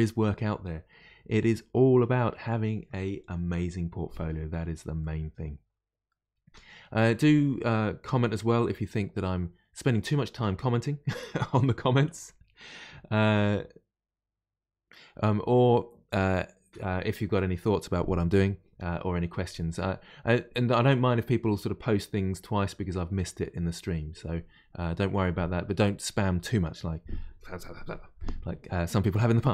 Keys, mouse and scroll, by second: 5.0-8.0 middle drag.